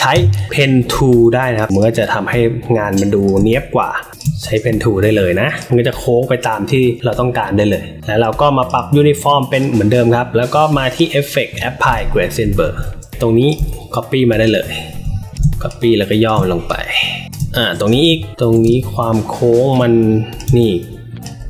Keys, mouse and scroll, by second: 0.1 p, 1.2 middle click, 1.2-1.7 scroll, 1.7 click, 3.2-4.1 shift+drag, 5.4 shift+click, 8.6 click, 9.4 click, 10.8 click, 11.8 click, 13.4 alt+click, 14.7-15.0 alt+scroll up 1, 15.3 click, 15.6 alt+shift+click, 16.6 click, 17.2 space, 17.9 alt+shift+click, 18.5 space, 18.6-19.6 drag, 20.3 alt+click.